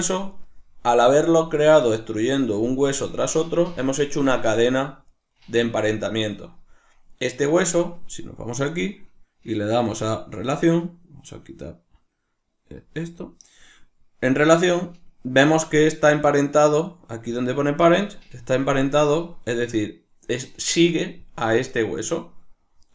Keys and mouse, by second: 0.4 right click, 4.3 right click, 4.7 right drag, 5.1 right click, 6.0 right click, 6.5 right click, 16.8-21.6 drag, 21.6 right click, 22.8 right click.